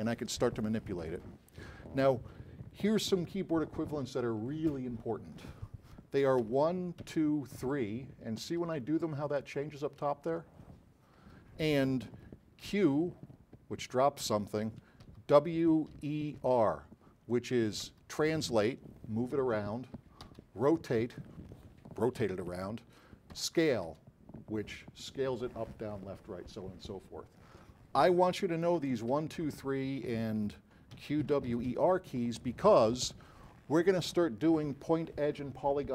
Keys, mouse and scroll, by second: 6.5-11.2 typing, 12.7 q, 15.2 w, 16.0 e, 16.5 r, 18.0 w, 20.3 e, 23.0 r, 24.0 r, 28.6-32.3 typing.